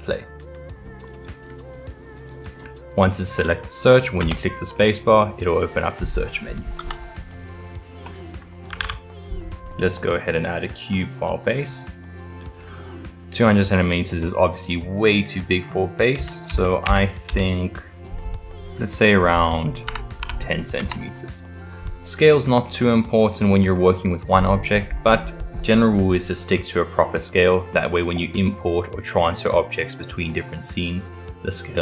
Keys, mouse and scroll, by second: 1.1 click, 3.3-4.3 middle drag, 4.3 space, 8.0-8.8 middle drag, 8.8 shift+a, 12.5-15.6 drag, 16.5 BackSpace, 23.8-26.9 middle drag.